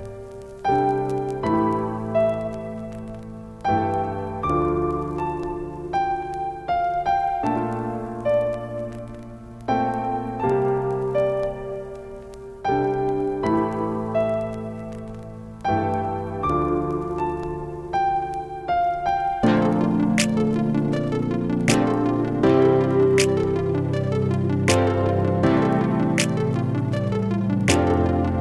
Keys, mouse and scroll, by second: 1.9 t, 2.5 click, 3.4 Caps_Lock, 3.5-5.4 typing, 6.9 click, 7.5 ctrl+space, 7.6 ctrl+click, 7.9 ctrl+space, 9.2-12.0 shift+drag, 12.0 Down, 14.3 Right, 15.1 Up, 19.7 shift+click, 21.7 ctrl+space, 23.4-27.0 drag, 27.0 ctrl+click, 27.3 ctrl+space, 28.2 click.